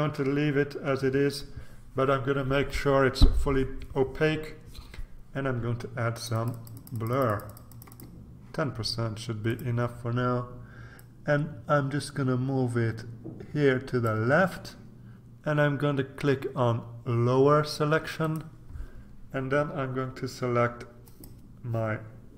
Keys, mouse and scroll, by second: 0.5-1.1 ctrl+scroll up 2, 6.1-8.6 drag, 9.5 click, 11.0-14.6 drag, 18.2 click, 21.0 click.